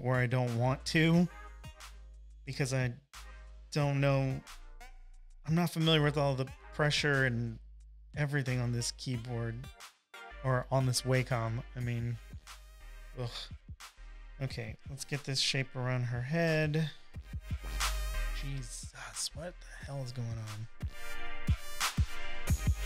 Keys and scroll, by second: 8.9 super+z, 9.2 space, 9.7 space, 9.8 space, 20.6 super+z, 20.9 space, 21.4 space, 21.5 space.